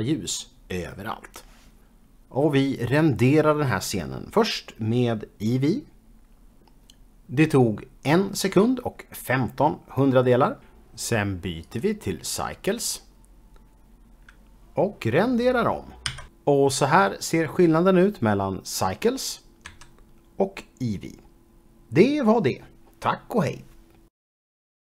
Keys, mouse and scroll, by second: 6.5 F12, 13.1 click, 14.3 click, 19.9 j, 22.4 j.